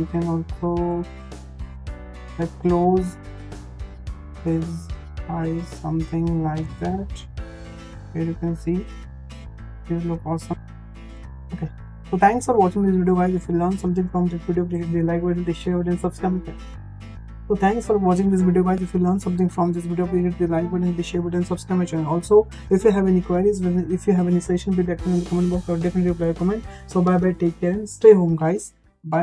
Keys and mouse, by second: 0.2 click, 1.0 g, 4.3-4.9 middle drag, 6.5 g, 10.0 ctrl+z, 10.3 ctrl+z.